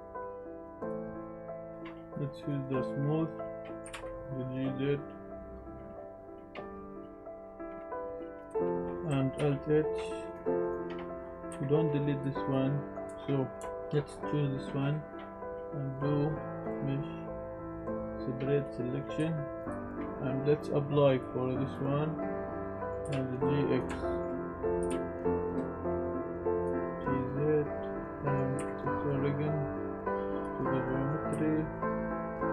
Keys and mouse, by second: 0.7 click, 1.7 ctrl+z, 1.7-2.7 drag, 3.6 click, 3.8 g, 3.9 z, 8.3 click, 8.5 Tab, 8.6 drag, 8.7 Tab, 8.8 drag, 9.3 alt+h, 10.0 click, 11.5 KP_Decimal, 12.5 drag, 12.7 middle drag, 13.1 Tab, 13.6 shift+click, 13.9 middle click, 16.8-18.6 drag, 19.2 Tab, 21.1-21.7 drag, 22.7 drag, 23.0 g, 23.1 x, 23.7 click, 24.1 shift+drag, 24.8 g, 24.9 x, 26.6 click, 26.9 KP_Decimal, 26.9 z, 26.9 g, 28.0 click, 28.0 g, 28.0 x, 28.0 y, 28.5 s, 28.7 ctrl+z, 30.8 drag, 31.3 s.